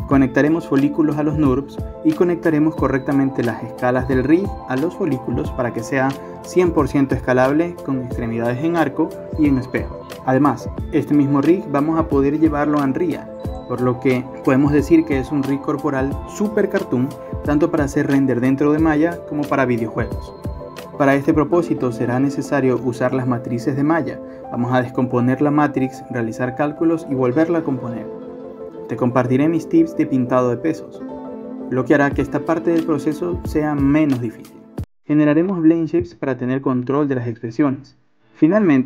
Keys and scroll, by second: 22.5 ctrl+Return, 23.1 ctrl+Return, 24.0 Delete, 24.7 ctrl+z, 25.9 ctrl+c, 26.2 ctrl+v, 26.7 BackSpace, 28.1 ctrl+c, 28.4 ctrl+v, 28.8 ctrl+c, 29.3 ctrl+v, 32.6 b, 33.6 w, 36.3 b, 37.0 ctrl+z, 37.5 ctrl+z.